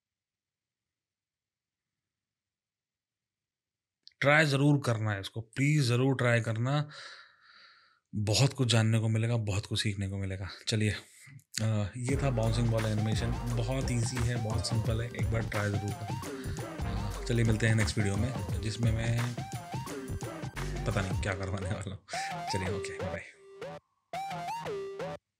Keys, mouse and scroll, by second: 4.6 space, 5.5 click.